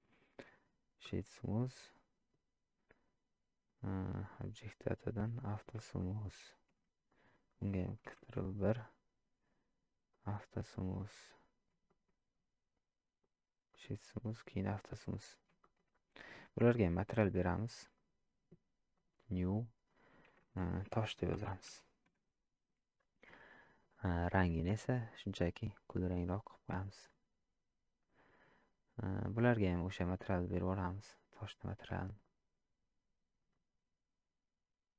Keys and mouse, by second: 0.4 right click, 5.3 click, 6.0 shift+middle drag, 8.2 ctrl+1, 10.1 click, 11.9 shift+middle click, 13.3 right click, 15.6 shift+middle click, 16.2 click, 18.0 click, 19.0 click, 20.3-22.8 drag, 29.7-31.0 drag, 32.3-33.5 drag.